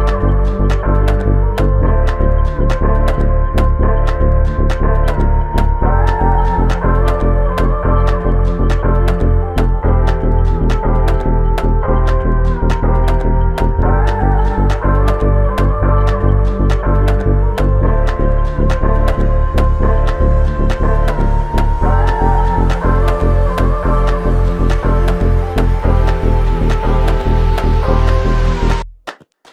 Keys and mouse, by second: 2.8 alt+click, 9.5 double click, 11.4 alt+click, 13.4 double click, 22.3 double click.